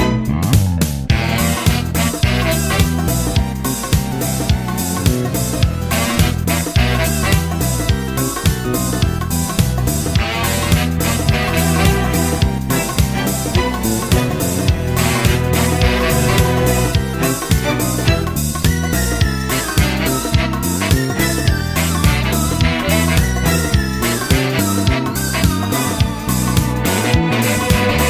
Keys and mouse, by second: 17.4 middle click, 18.0 middle click, 18.7 middle click, 19.5 middle click, 20.5 middle click, 22.9 middle click, 23.4 middle click, 24.2 middle click, 24.4 middle click.